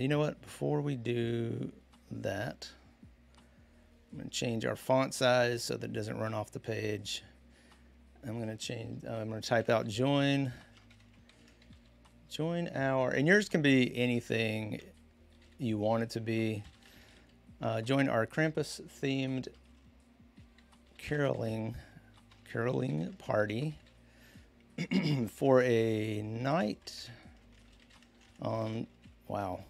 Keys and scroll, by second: 0.0-0.1 typing, 2.2 Escape, 9.2-29.6 typing.